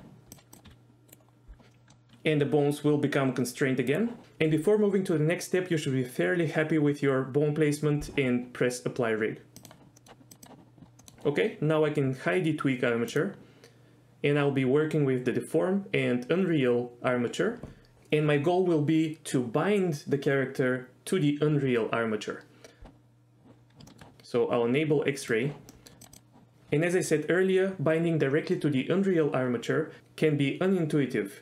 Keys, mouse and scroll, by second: 0.7 s, 1.7 middle click, 2.3 s, 3.9 right click, 9.9 middle click, 10.3 click, 11.0 middle click, 13.1 click, 23.9 shift+middle click, 25.2 click, 25.7 middle click, 26.0 drag.